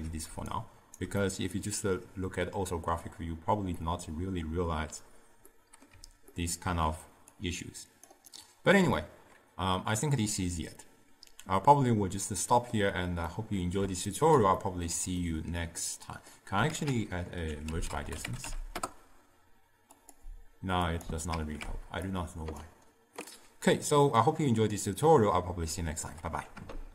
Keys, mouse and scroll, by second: 0.6 right click, 1.3-6.0 middle drag, 6.0 d, 6.4 middle click, 6.9 d, 7.4 click, 8.1 d, 8.4 right click, 9.0-12.3 middle drag, 18.8 ctrl+a, 21.4 ctrl+x, 23.3-26.3 middle drag.